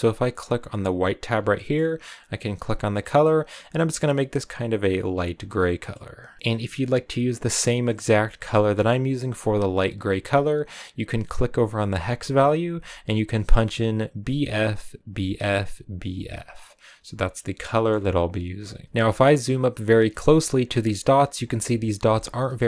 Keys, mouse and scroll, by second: 0.4 scroll up 1, 0.6 click, 1.6-2.8 middle drag, 2.8-4.1 drag, 5.9 middle click, 6.4 click, 16.9-17.2 scroll down 5, 17.2 middle click, 17.7-18.8 scroll up 3, 18.8-20.0 ctrl+middle drag, 20.1-22.6 ctrl+middle drag.